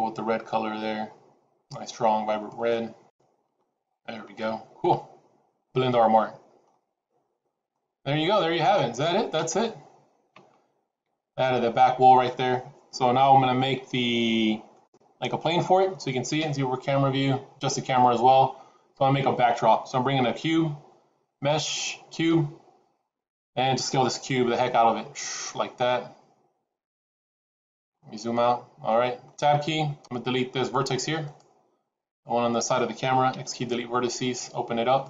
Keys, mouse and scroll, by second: 4.9-5.5 scroll down 3, 5.8 middle click, 6.7 scroll down 2, 7.6 middle click, 13.9 scroll down 2, 14.6 middle click, 16.3 KP_0, 17.8 middle click, 18.5-18.9 scroll down 3, 20.1 shift+a, 24.5 s, 27.9-28.8 scroll down 2, 28.8 middle click, 28.8-29.1 scroll down 3, 29.4 Tab, 31.4 click, 31.9 click, 33.2 x.